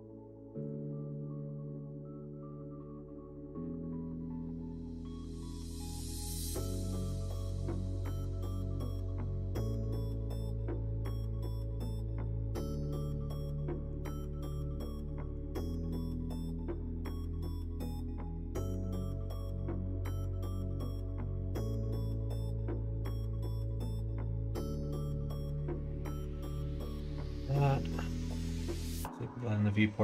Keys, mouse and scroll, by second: 4.9-11.1 drag, 7.6 BackSpace, 12.8-19.3 drag, 20.4-22.1 middle drag, 23.0 click, 23.7-27.6 drag.